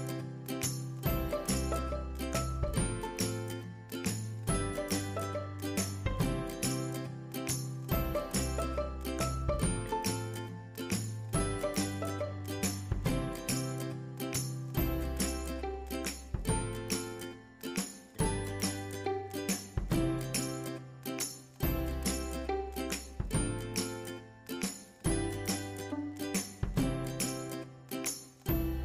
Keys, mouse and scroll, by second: 0.4 scroll down 1, 1.3-3.1 scroll up 1, 3.1-5.9 drag, 5.9-7.5 scroll down 1, 8.0-10.3 shift+drag, 10.3 scroll up 1, 11.1-14.3 drag, 16.4-16.7 scroll up 1, 18.6 click, 22.7 click, 25.2 space, 26.0 click, 26.7 ctrl+click.